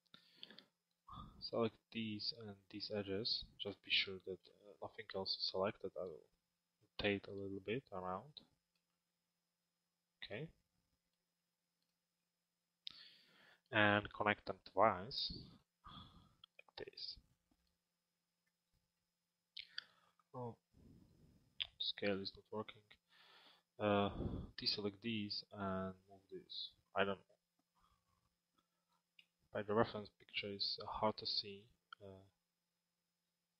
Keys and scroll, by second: 7.9 z.